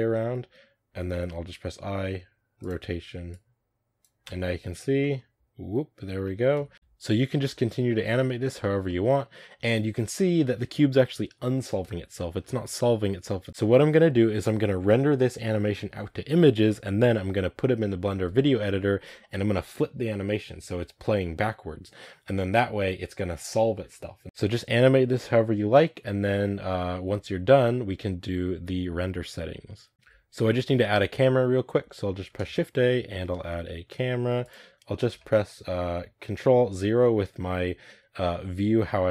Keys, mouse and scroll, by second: 3.2-4.1 drag, 4.1 space, 4.9-6.4 middle drag, 6.4 space, 7.9 middle drag, 8.2-9.5 scroll down 3, 8.5 shift+middle click, 8.8 middle click, 9.5-9.9 scroll up 1, 12.3 space, 12.6-24.2 drag, 24.2 space, 28.4 space, 29.9-34.4 middle drag, 34.4 shift+a, 35.1-39.1 shift+middle drag.